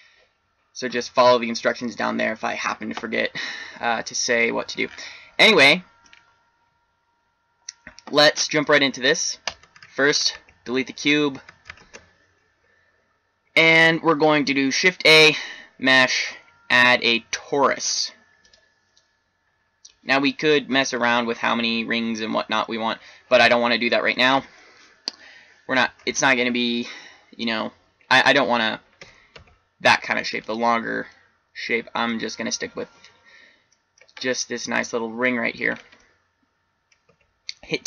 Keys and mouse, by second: 9.4 right click, 10.3 x, 11.7 shift+a, 20.7 middle click, 23.0 middle click, 23.8-28.8 middle drag, 28.9 s, 31.0-32.4 middle drag, 37.1 Tab.